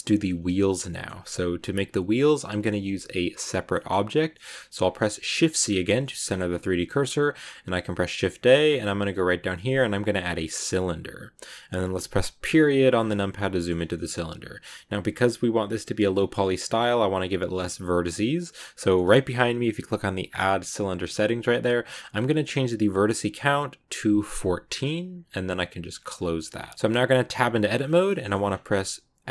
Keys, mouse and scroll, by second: 4.6 click, 5.1 shift+c, 5.9 shift+middle click, 6.1 shift+scroll up 5, 6.6 shift+a, 12.1 KP_Decimal, 12.8 scroll down 5, 13.0 middle click, 13.6 scroll up 2, 13.8-16.0 middle drag, 16.0-16.6 scroll up 1, 19.7-24.6 drag, 26.1 click, 26.6 middle click, 27.2 Tab, 28.0 middle click, 28.3 scroll down 1.